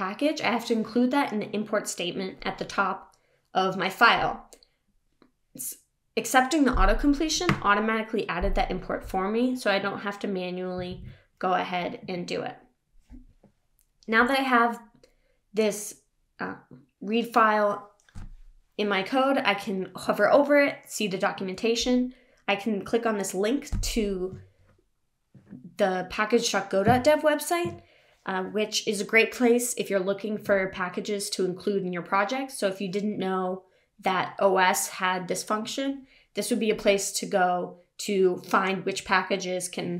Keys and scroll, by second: 10.9 super+s.